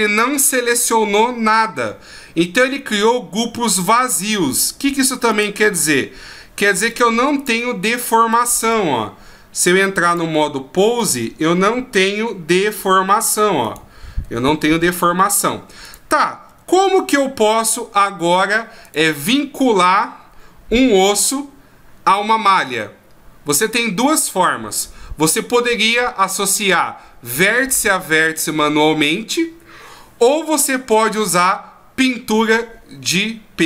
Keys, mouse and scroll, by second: 5.7 click, 6.9 click, 8.2 right click, 8.6 right click, 10.0 click, 12.0 r, 13.6 right click, 14.3 r, 15.8 right click, 16.5 r, 18.8 right click.